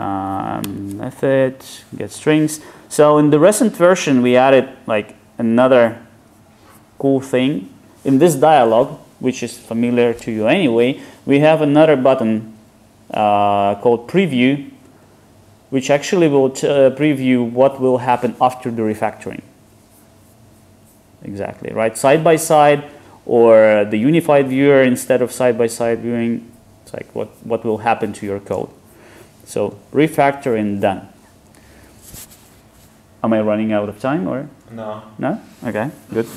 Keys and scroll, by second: 0.8 alt+super+m.